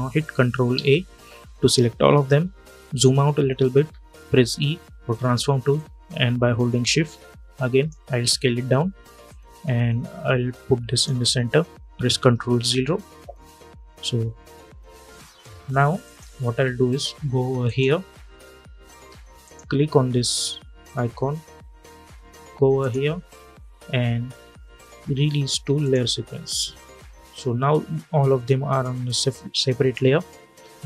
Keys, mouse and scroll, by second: 0.4 ctrl+a, 1.7 alt+scroll down 1, 3.4 e, 5.5-9.0 drag, 9.0-12.2 drag, 12.2 ctrl+0, 15.4 v, 15.7 click, 24.6 click, 25.5 click.